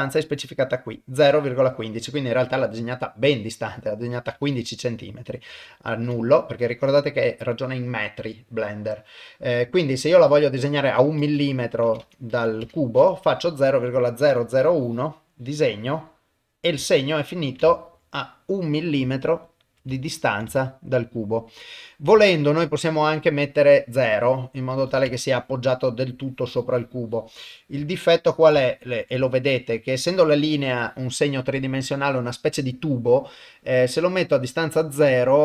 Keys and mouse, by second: 0.2-4.5 drag, 4.7 middle click, 5.5 ctrl+z, 6.6-13.1 drag, 12.0 KP_0, 13.3 middle click, 14.1-16.3 drag, 16.6 middle click, 17.0 ctrl+middle click, 17.7 shift+middle click, 18.1 middle click, 19.2 shift+middle click, 19.9 ctrl+middle click, 20.5 shift+middle click, 21.0-22.1 middle drag, 22.3 ctrl+middle click, 22.7 middle click, 24.1-25.2 drag, 25.4 middle click, 26.2-27.6 drag, 27.9 ctrl+middle click, 28.6 shift+middle click, 29.3 ctrl+middle click, 32.1-35.4 middle drag.